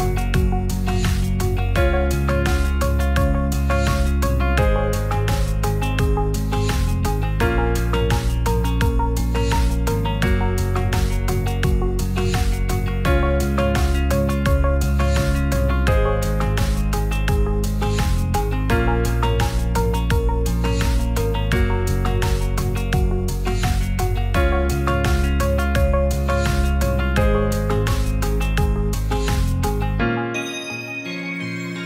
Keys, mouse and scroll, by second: 0.1 2, 0.3 click, 1.1 shift+click, 1.5 x, 3.3 middle click, 4.0 Tab, 5.5-6.9 right drag, 8.4 click, 9.7-12.4 shift+drag, 13.3 ctrl+z, 14.2 Tab, 14.5 Tab, 14.8 Tab, 15.8-16.8 shift+drag, 16.9 shift+click, 17.4 v, 17.8 right click, 18.3 Tab, 19.3-20.0 right drag, 21.9-24.3 shift+drag, 24.7 alt+middle click, 28.3-28.9 middle drag, 29.1 Tab, 29.7 Tab, 30.1-31.2 middle drag.